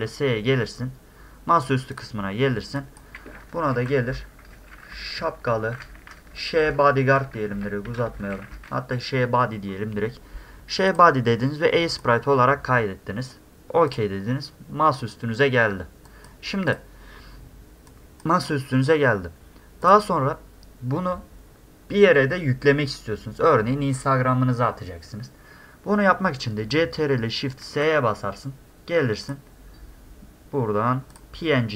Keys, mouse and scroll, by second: 2.0 click, 2.8 click, 5.9 a, 8.4 d, 10.9 click, 12.0 click, 13.9 click, 15.0 click, 16.1 click, 16.7 click, 17.9 click, 18.5 click, 19.9 click, 24.6-25.2 scroll down 1, 25.2-25.5 scroll up 1, 27.7 ctrl+shift+s, 29.3 click, 31.1 click.